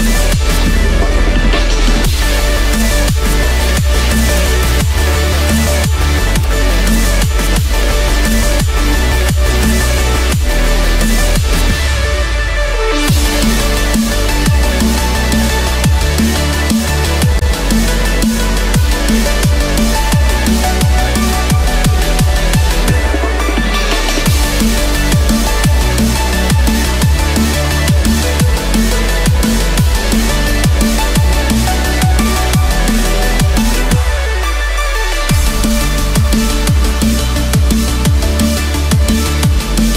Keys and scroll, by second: 1.0 ctrl+=, 6.4 ctrl+-, 15.2 ctrl+=, 17.7 ctrl+-, 18.4 ctrl+=, 20.6 ctrl+-, 21.3 ctrl+0, 35.4 ctrl+-, 39.5 ctrl+-.